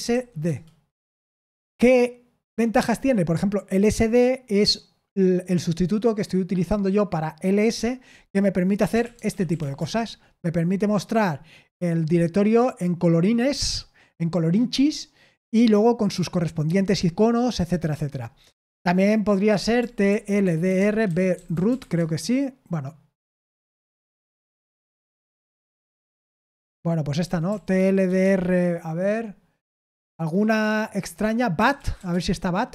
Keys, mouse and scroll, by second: 0.0-0.6 typing, 8.9-10.0 typing, 20.1-22.3 typing, 27.5-28.5 typing, 31.5-32.4 typing.